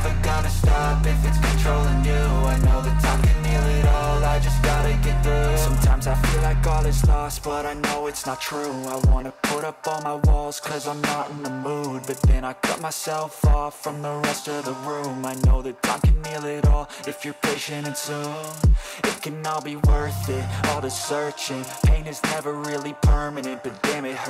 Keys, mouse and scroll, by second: 0.3 middle click, 1.9 right click, 3.0 click, 4.1 click, 4.8-8.1 scroll, 8.3 click, 9.5-9.9 scroll, 13.6 alt+click, 16.1 click, 18.1 click, 19.0 ctrl+c, 20.1 click, 21.2 click, 22.3 ctrl+v.